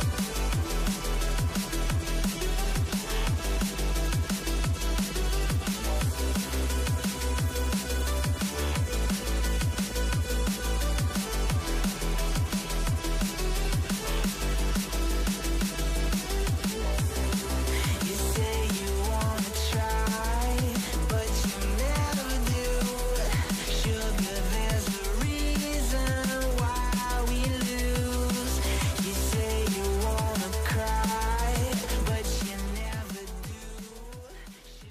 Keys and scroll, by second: 2.5-5.4 typing, 7.5-9.5 typing, 11.2 typing, 12.5-16.3 typing, 17.7-26.3 typing, 28.1-34.9 typing.